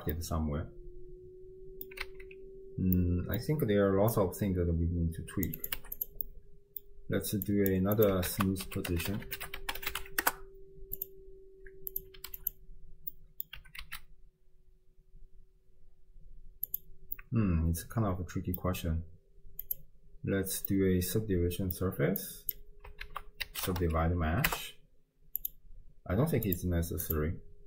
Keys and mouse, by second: 0.3-1.9 drag, 2.0 alt+z, 3.0 click, 4.2-5.5 drag, 5.6 click, 6.2 middle click, 7.5 drag, 8.0 click, 8.3 ctrl+a, 9.2 o, 11.9 click, 13.3 middle click, 13.7 g, 17.3-18.7 middle drag, 19.7 click, 20.7-21.8 middle drag, 22.2 click, 23.1 ctrl+a, 26.5 click, 27.1 click.